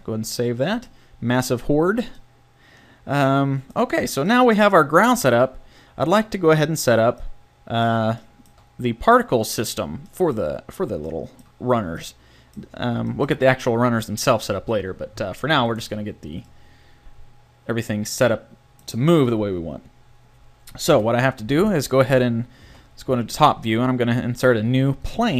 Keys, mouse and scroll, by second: 0.0 middle click, 1.9 a, 11.1 middle click, 12.4 middle click, 16.4-18.4 middle drag, 20.9 KP_7, 22.6 shift+a.